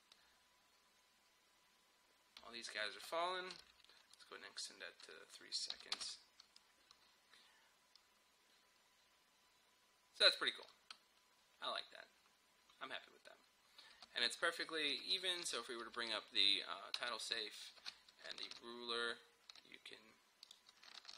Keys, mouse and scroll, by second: 3.0 space, 3.6 -, 4.2-5.8 drag, 5.8 n, 6.0 space, 14.0 space, 15.0 ;, 17.0 space, 18.5 ctrl+r, 20.5 click, 21.0 ctrl+r.